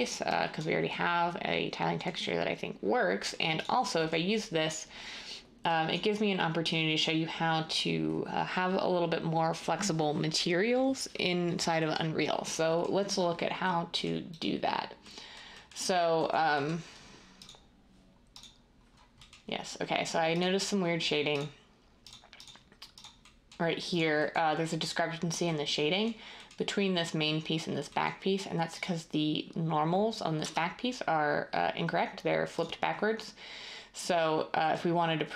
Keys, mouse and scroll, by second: 30.4 Tab.